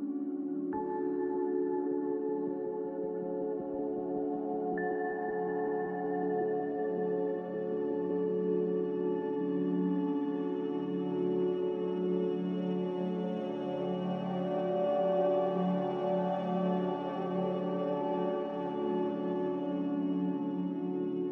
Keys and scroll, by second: 20.0-20.8 typing.